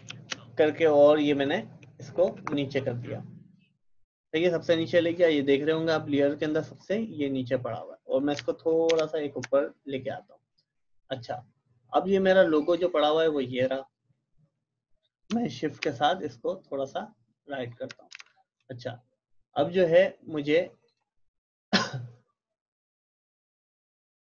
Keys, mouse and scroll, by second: 6.4-8.9 drag, 8.9 ctrl+], 11.6-12.4 typing, 12.7 click, 15.8 shift+Right, 20.9 click, 23.2-24.3 drag.